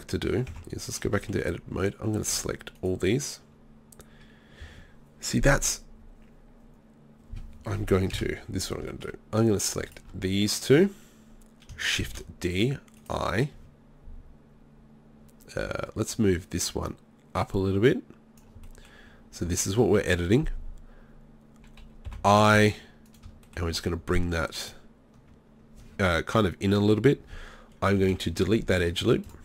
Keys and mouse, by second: 0.5 Tab, 2.2-3.8 drag, 2.8-3.8 right drag, 8.2 KP_7, 10.5 middle click, 12.1 shift+d, 13.1-14.9 drag, 16.9-18.4 drag, 18.7 middle click, 19.7-22.1 drag, 22.1 i, 24.6 middle click, 28.0 Delete.